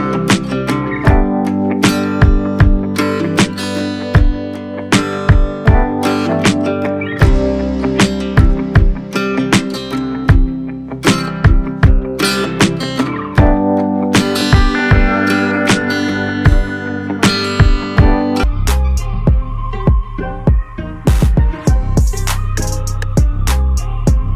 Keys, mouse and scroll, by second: 1.0 alt+middle click, 1.8-4.1 scroll up 1, 4.1 alt+scroll up 1, 9.3-12.1 drag, 12.1 ctrl+z, 13.1-14.0 scroll up 1, 14.1-17.8 alt+drag, 17.8-18.9 scroll down 1, 19.8-22.7 drag, 22.7-23.6 scroll down 1, 23.7 alt+middle click.